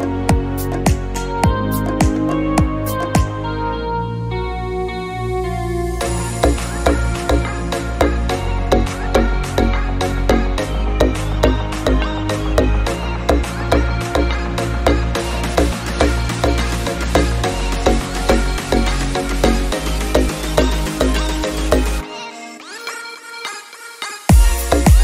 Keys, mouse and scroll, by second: 1.7-2.2 scroll down 2, 2.2-3.6 middle drag, 3.6-4.0 drag, 4.0 middle click, 4.4 click, 8.0 click, 10.2-10.7 scroll up 4, 13.8-14.5 drag, 14.5-15.6 scroll down 3, 15.6 middle drag, 15.6 scroll down 1, 15.9 KP_7, 16.3-16.7 scroll up 5, 16.8-17.2 shift+middle drag, 17.2 s, 20.0 g, 20.6 r, 21.3 click, 21.7 click, 22.7 g, 23.3-24.3 middle drag, 24.3-25.0 drag.